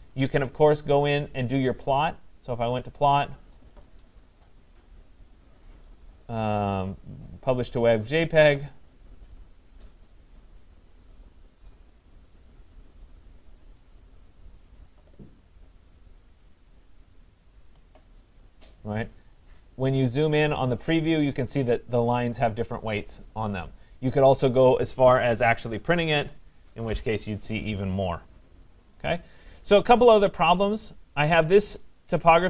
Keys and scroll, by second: 25.7 Escape.